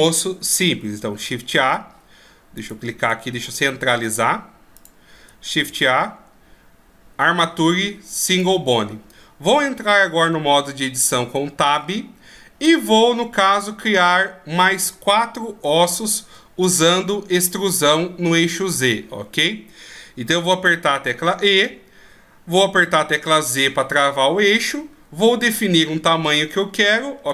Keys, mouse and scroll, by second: 2.6 click, 3.3 shift+s, 5.5 shift+a, 11.7 Tab, 12.6 middle click, 13.8-14.2 scroll up 1, 15.1 scroll up 5, 15.9 shift+scroll up 3, 16.9 middle click, 18.4-18.9 scroll down 2, 18.9 middle click, 21.1 e.